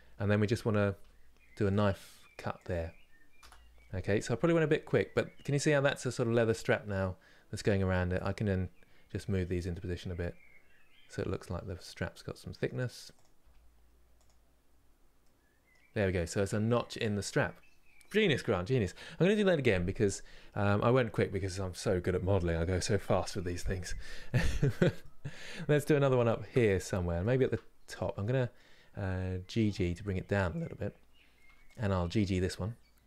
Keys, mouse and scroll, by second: 0.7 k, 3.7 scroll down 1, 4.1 middle click, 5.0 scroll down 2, 5.8-6.5 scroll up 2, 7.9 click, 8.9 g, 11.8-12.9 middle drag, 12.9 click, 13.1 g, 14.4 scroll down 2, 14.9 middle click, 15.6-24.7 scroll down 2, 24.7 middle click, 25.2 scroll up 3, 25.8 shift+middle click, 26.4-26.9 scroll up 1, 26.9 shift+middle click, 27.6 click, 27.9-29.3 middle drag, 29.3 g, 31.7 g.